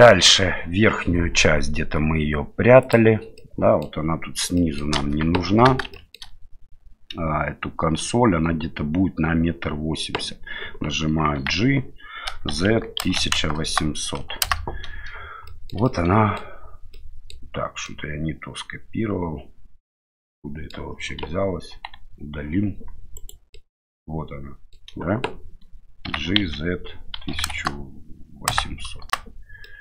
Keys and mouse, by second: 0.0 shift+middle drag, 2.8 click, 3.4 middle click, 4.6 middle click, 5.0 KP_1, 5.9 shift+middle click, 11.4 g, 15.5 shift+middle drag, 15.9 middle click, 17.0 middle click, 18.0-20.7 middle drag, 21.7 Delete, 23.2 right click, 23.5-24.8 middle drag, 26.1 g, 29.7-29.8 middle drag.